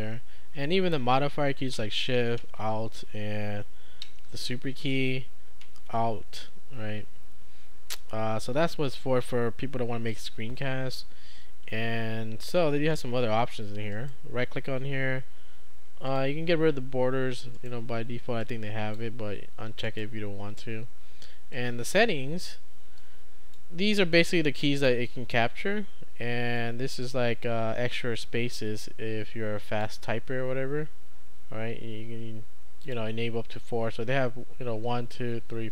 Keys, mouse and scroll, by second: 13.9 right click, 16.1 click, 17.5 right click, 18.4-19.4 drag, 19.8 right click, 21.5-22.5 drag, 23.0-24.0 drag, 26.6-30.3 drag, 32.9 click.